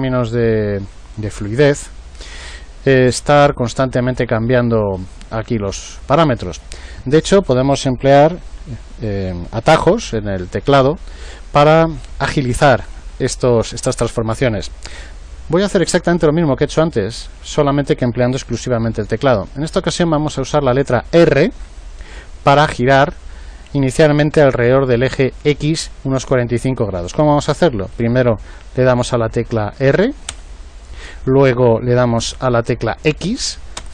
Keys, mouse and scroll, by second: 30.3 r.